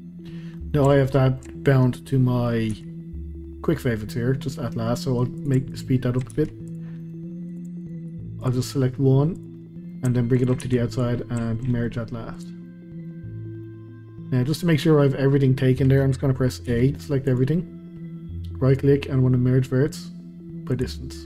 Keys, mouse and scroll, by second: 0.3 scroll down 2, 0.6-2.7 middle drag, 2.7 q, 5.4 click, 5.7 shift+click, 6.3 q, 7.0-7.5 middle drag, 7.5 click, 7.8 shift+click, 8.1 q, 8.7 middle click, 9.4 click, 9.6 middle click, 10.4 shift+click, 10.6 q, 11.4 shift+middle click, 12.4 click, 12.7 middle click, 13.4 scroll down 2, 13.7-16.7 middle drag, 16.7 a, 17.3-21.2 right drag.